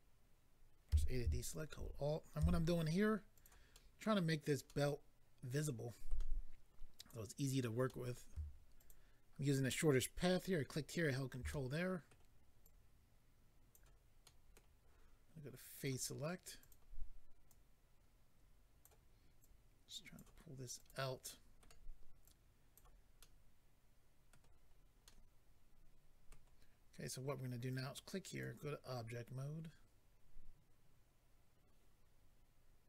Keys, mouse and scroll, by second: 0.9 a, 1.5 alt+click, 1.6 alt+click, 2.4 s, 3.3 click, 3.4 click, 3.7 middle click, 4.6 middle click, 7.0 click, 7.1 click, 7.9 middle click, 8.8 ctrl+click, 11.5 middle click, 12.6 click, 14.2 middle click, 15.7 click, 15.8 click, 16.6 click, 16.7 click, 17.5 click, 19.4 click, 20.7 click, 20.9 click, 21.2 middle click, 22.2 click, 23.2 middle click, 24.7-25.0 scroll down 2, 25.0 middle click, 27.7 click, 27.7 click, 28.3 click, 28.4 click.